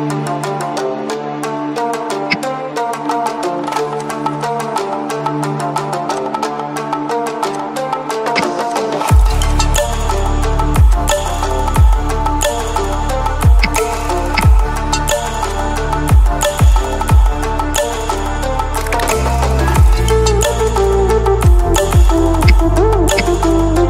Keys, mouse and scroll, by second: 2.2 p, 3.9 click, 8.2 v, 8.6-10.0 drag, 13.6 ctrl+c, 15.4-17.3 alt+drag, 22.4 ctrl+c, 22.8 ctrl+f.